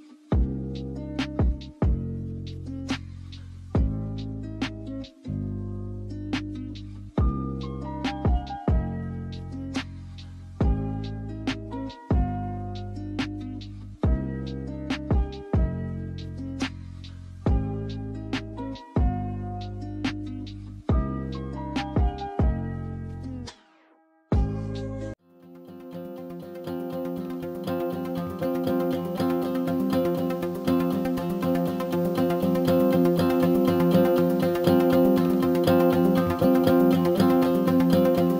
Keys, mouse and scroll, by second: 0.4-3.7 drag, 3.8 click, 4.2 Tab, 4.4 a, 4.5 s, 6.1 click, 6.2 alt+click, 6.7 s, 7.6 Tab, 8.0 g, 10.7 click, 11.0 Tab, 11.3 3, 11.4 click, 11.8 shift+d, 12.2 p, 12.5 Tab, 12.6 drag, 12.9 s, 13.4-14.2 right drag, 14.2 s, 14.9 Tab, 15.2 a, 15.5 e, 16.4 shift+middle click, 17.4 click, 19.7 e, 21.1 Tab, 21.6 Tab, 21.8 a, 22.0 s, 22.6 Tab, 22.8 f, 23.1 g, 27.8 click, 28.2 Tab, 28.4 a, 28.5 s, 29.8 Tab, 29.9 click, 30.2 Tab, 30.5 click, 31.0 alt+click, 31.6 s, 32.6 s, 33.4 Tab, 33.6 click, 33.8 click, 34.3-35.4 drag, 35.6 click, 36.3-36.9 right drag, 36.9 click, 37.5 drag, 37.6-38.0 scroll up 1, 38.0 s.